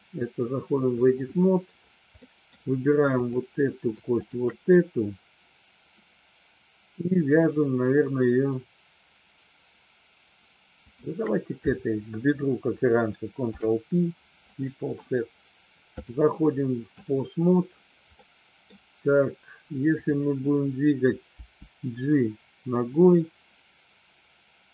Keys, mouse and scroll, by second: 2.1 middle click, 3.1 click, 4.2 shift+click, 10.7 shift+click, 13.5 ctrl+p, 16.0-17.0 drag, 18.1 middle click, 20.0-21.0 drag, 21.3 g.